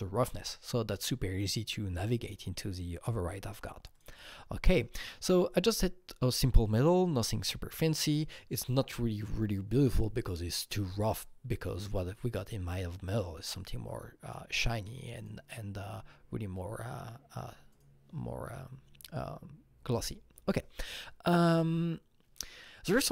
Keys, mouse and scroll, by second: 3.9 click, 3.9 scroll up 1, 6.2-9.9 drag, 10.2-11.1 scroll down 4, 13.5-17.7 drag, 13.9-14.2 scroll down 1, 17.7-20.1 drag, 20.1-23.1 drag.